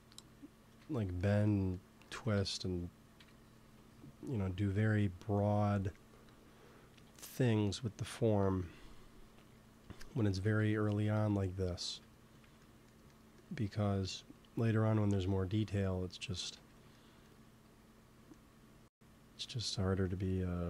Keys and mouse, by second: 0.7 ctrl+z, 2.2 ctrl+s, 3.1 KP_1, 8.4 KP_3, 11.2-14.9 middle drag, 14.4-16.3 drag, 16.4 x, 19.7 f, 20.4 f.